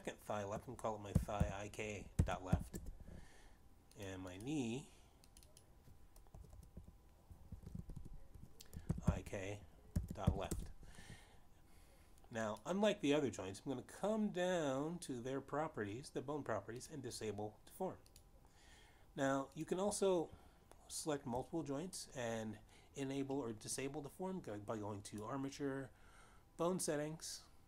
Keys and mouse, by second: 0.0-0.1 typing, 1.9 shift+i, 2.5 shift+k, 2.9 ., 3.5 shift+l, 3.8 Return, 5.2 click, 5.4 click, 6.4 click, 6.5 click, 7.0-11.3 typing, 11.6 Return, 13.4 click, 17.7 click, 19.3 click, 20.7 click, 22.0 shift+click, 26.4 click.